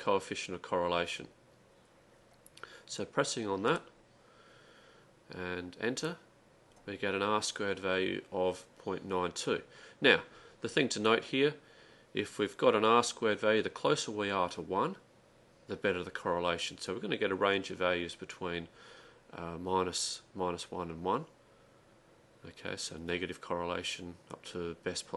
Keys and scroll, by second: 5.8-6.5 typing.